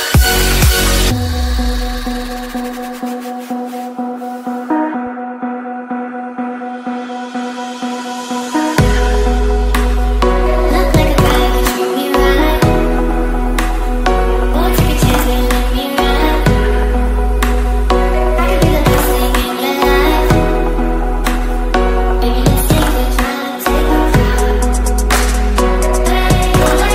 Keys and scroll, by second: 9.8 ctrl+k, 20.6 ctrl+g.